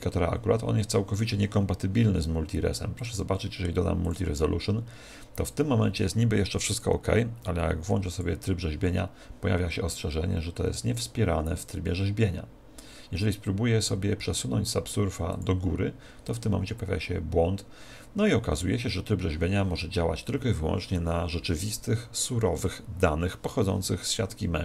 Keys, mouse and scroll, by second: 2.9 click, 6.7 click, 15.3 click.